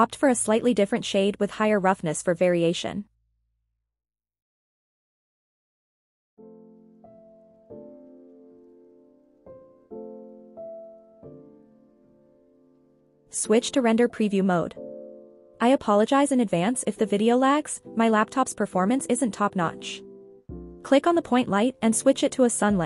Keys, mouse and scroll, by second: 1.7 click, 3.2 click, 6.1 click, 12.5 scroll down 1, 13.0 click, 15.4 click, 17.6 click, 18.9 click, 20.7 click, 22.0 click.